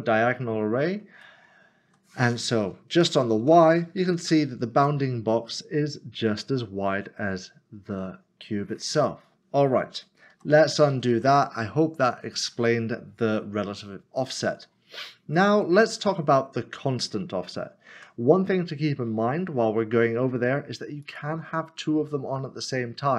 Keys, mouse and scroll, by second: 3.0 click, 3.7 0, 4.8 Return, 5.0 middle click, 9.0 middle click, 10.3 ctrl+z, 18.0 Tab, 18.7 middle click, 21.0 click.